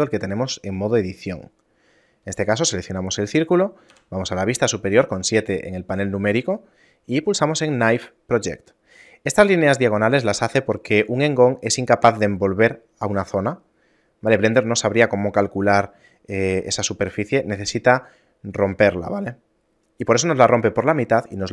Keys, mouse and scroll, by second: 1.7 middle click, 2.6 ctrl+right click, 4.1 KP_7, 5.1 middle click, 5.9 scroll up 1, 6.5 middle click, 6.5-7.2 scroll up 2, 7.9 click, 10.3 ctrl+Tab.